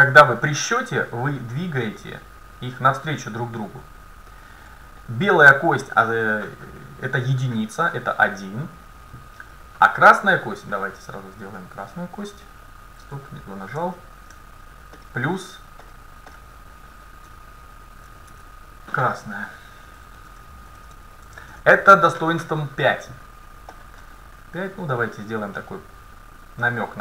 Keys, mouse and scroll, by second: 4.3-6.1 right drag, 5.0-7.1 middle drag, 10.3-12.9 right drag, 11.9-13.7 drag, 13.8 ctrl+z, 15.0-17.8 drag, 18.3 BackSpace, 23.8-26.9 drag.